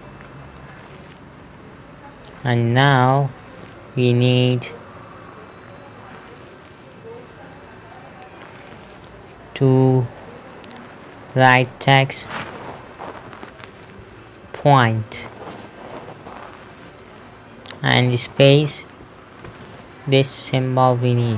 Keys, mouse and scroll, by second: 0.8 middle click, 9.4 right click, 12.0 click, 13.5 BackSpace, 14.5 Caps_Lock, 14.9-16.4 typing, 18.8 space, 19.9 ;.